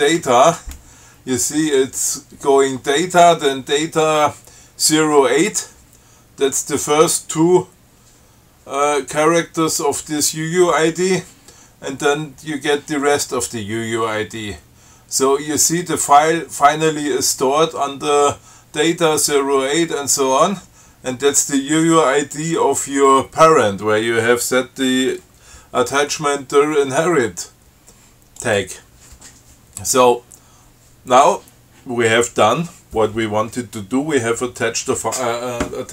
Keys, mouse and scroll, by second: 0.0-0.2 typing, 28.7 click.